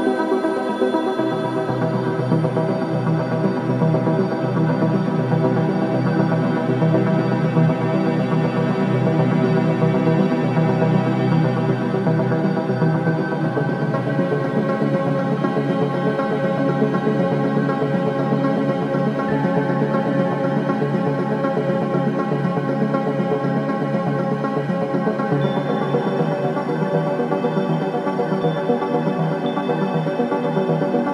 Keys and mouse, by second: 2.1 click, 3.4 click, 3.8-5.1 typing, 3.9 click, 4.9 click, 9.0 s, 11.1 click, 12.5 space, 15.2 space, 16.3 ctrl+s, 17.7-19.1 ctrl+alt+drag, 19.4 click, 19.9 alt+click, 20.7 click, 20.9 click, 21.6-23.9 alt+drag, 24.2 alt+shift+click, 24.8 ctrl+alt+click, 25.6 alt+shift+click, 26.3-28.0 drag, 28.5-30.2 shift+drag, 30.5-31.1 shift+drag.